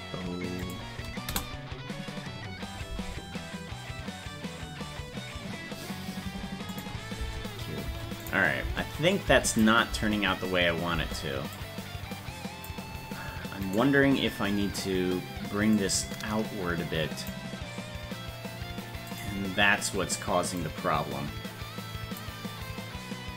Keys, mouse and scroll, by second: 6.8 click, 7.2 space, 8.3 click, 8.6 space, 9.6 click, 9.6 space, 11.6-12.7 drag, 11.6 space, 13.8 right click, 15.8-17.3 drag, 19.2 right click, 20.6-22.2 drag.